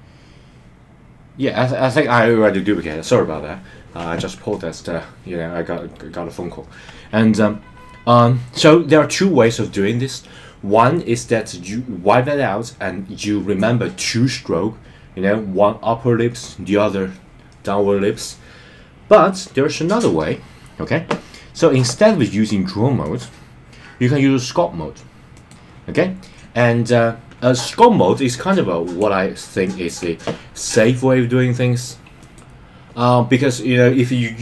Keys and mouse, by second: 23.2-25.5 drag, 29.3 shift+middle click.